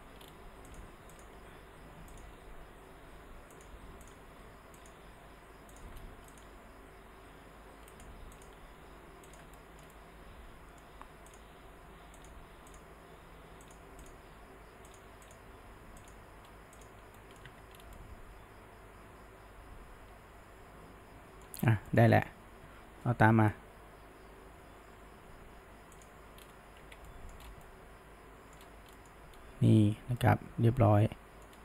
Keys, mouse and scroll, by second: 1.2 click, 1.4 g, 2.6 g, 4.1 click, 4.3 g, 5.1 g, 6.4 click, 6.6 g, 8.4 click, 8.6 g, 9.6-11.3 shift+middle drag, 11.3 click, 11.7 g, 12.7 click, 13.2 g, 14.1 click, 14.3 g, 15.3 click, 15.5 g, 16.8 click, 17.2 middle click, 17.5 Tab, 17.8 scroll down 1, 18.0-21.0 middle drag, 21.6 scroll down 1, 21.9-25.2 shift+middle drag, 26.0 click, 26.4-26.8 scroll down 1, 26.8 alt+a, 27.1-27.4 middle drag, 27.4 scroll up 1, 27.7-28.6 middle drag, 28.6 scroll up 1, 29.0-31.5 middle drag, 31.5-31.6 scroll down 1.